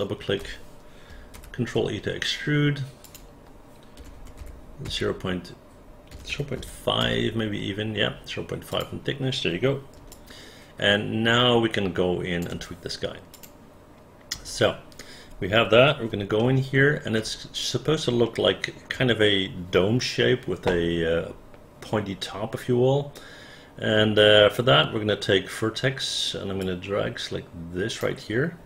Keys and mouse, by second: 1.4 ctrl+e, 3.1 click, 4.0 KP_0, 4.4 KP_2, 4.9 Return, 6.1 KP_0, 6.3 KP_Decimal, 6.6 KP_5, 7.0 Return, 8.7 click, 10.1-12.4 alt+drag, 13.3 click, 14.3 space, 16.4 alt+middle click, 18.3 alt+middle click, 23.2-24.5 right drag, 26.6-28.0 drag.